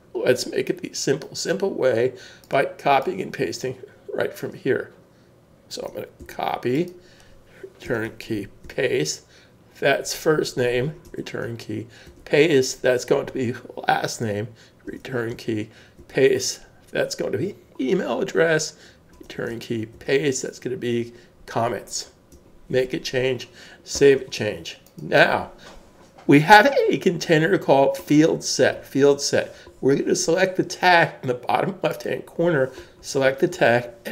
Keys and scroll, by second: 6.2 super+c, 7.8 Return, 8.6 super+v, 11.1 Return, 12.0 super+v, 14.9 Return, 16.0 super+v, 19.1 Return, 19.9 super+v, 23.9 super+s.